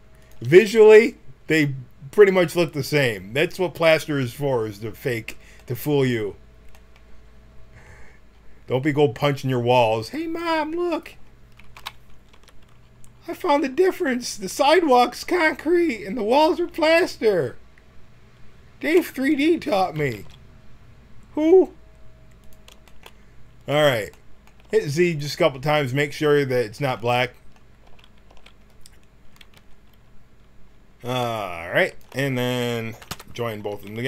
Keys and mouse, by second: 9.7-11.7 drag, 11.7 KP_1, 12.3 Tab, 19.9 g, 24.6 z, 24.7 z, 27.8 z, 28.2 z, 29.5 t, 31.8-33.5 drag, 33.1 ctrl+j, 33.5 Tab, 33.8 a.